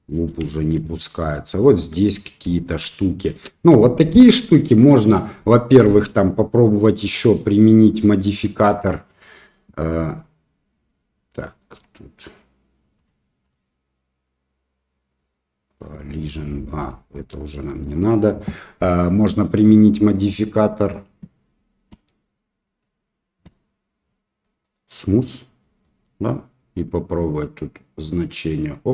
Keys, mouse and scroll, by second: 0.1 middle drag, 0.5 shift+middle drag, 0.9 middle click, 1.6 middle click, 2.6 shift+middle drag, 3.0 middle click, 4.8-5.4 middle drag, 7.1 click, 10.1 click, 11.6-13.1 drag, 13.5-15.9 drag, 16.9-18.0 drag, 20.2 click, 20.9-25.2 drag, 25.8 middle click, 27.2-28.9 drag.